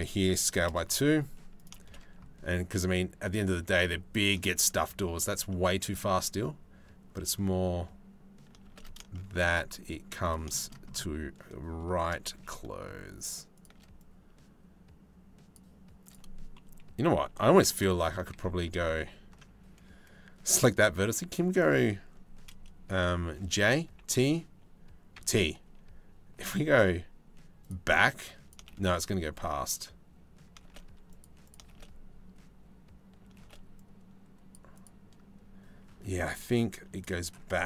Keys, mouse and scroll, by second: 1.2 click, 1.4 shift+space, 5.1 shift+middle click, 8.2 shift+space, 8.9 middle click, 9.8 click, 10.3 click, 11.9 shift+d, 13.6-15.2 drag, 15.7 click, 17.6 ctrl+z, 18.0 ctrl+z, 18.5 ctrl+z, 20.4 right click, 23.0 j, 23.6 y, 24.8 t, 27.8 click, 28.3 shift+space, 30.2 shift+space, 30.8 click, 31.1 click, 31.3 shift+space, 33.0 shift+space, 33.4 click, 34.4 click, 35.5 c, 37.3 t.